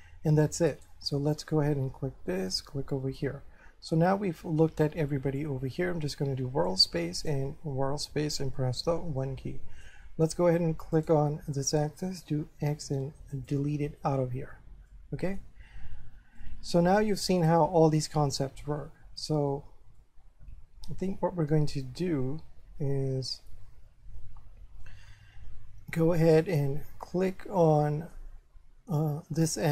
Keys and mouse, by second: 0.7 right click, 2.4 click, 5.4 click, 6.7 click, 8.7 1, 9.2 shift+middle click, 11.0 right click, 12.6 x, 13.3 click, 14.9 shift+middle click, 16.4 shift+middle click, 20.0 middle click, 21.3 1, 21.8 shift+middle click, 26.4 right click, 27.3 shift+middle click, 29.5 right click.